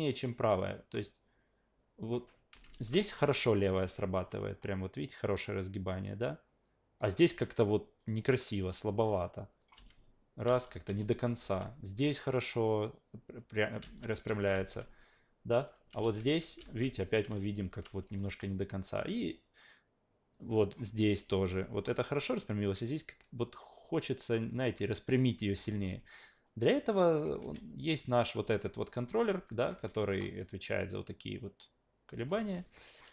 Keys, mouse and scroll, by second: 2.5 alt+v, 2.7 alt+v, 4.5-7.0 drag, 9.2-9.7 drag, 9.7 alt+v, 10.4 alt+v, 10.9 alt+v, 11.4 alt+v, 13.8 alt+v, 14.2 alt+v, 14.5 alt+v, 15.7 alt+v, 16.0 alt+v, 16.6 alt+v, 17.2 alt+v, 17.5 alt+v, 19.0-20.8 drag, 24.0 click, 25.5 ctrl+z, 26.2-26.9 alt+drag, 27.0 alt+right click, 27.4 q, 28.0 click, 28.5 alt+middle click, 28.8 alt+right click, 29.0 alt+click, 29.3 alt+click, 29.8 e, 30.4-32.3 drag, 32.4 ctrl+z, 32.6 alt+right drag, 32.8 alt+drag.